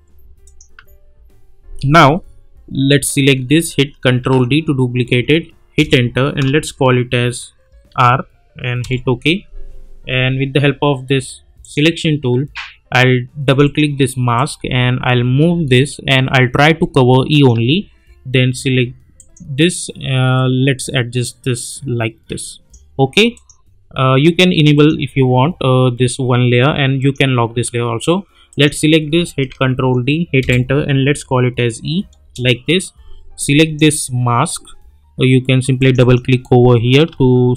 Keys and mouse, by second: 0.7 u, 2.9 click, 4.2 ctrl+d, 5.8 Return, 7.8 shift+r, 8.8 Return, 11.6-22.7 drag, 22.7 -, 23.3 click, 27.0 click, 29.4 ctrl+d, 30.4 Return, 31.2 e, 32.2 Return, 33.4-34.0 drag.